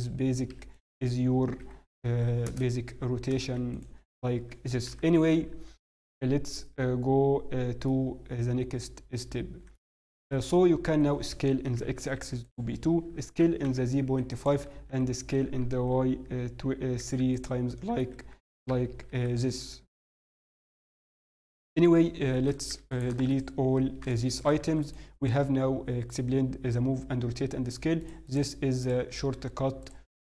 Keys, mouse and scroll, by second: 3.3 ctrl+a, 3.3 click, 4.8 n, 7.8 middle click, 10.9-11.6 scroll down 1, 11.6 s, 13.0 s, 17.6 middle click, 18.0 s, 20.5 middle click, 21.7 KP_7, 22.5 click, 22.9 shift+click, 23.3 click, 24.2 shift+click, 24.6 x, 25.5-26.6 scroll down 1, 28.0 click, 28.0-28.7 scroll down 2.